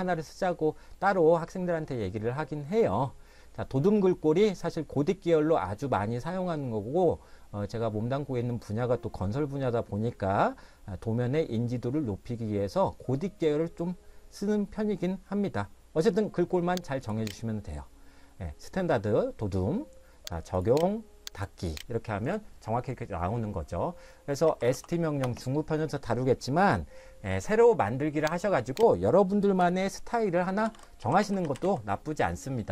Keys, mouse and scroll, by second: 17.1 click, 20.6 click, 22.2-22.7 scroll down 1, 22.7 middle click, 24.2-25.2 typing, 28.4 click, 30.4-32.2 typing.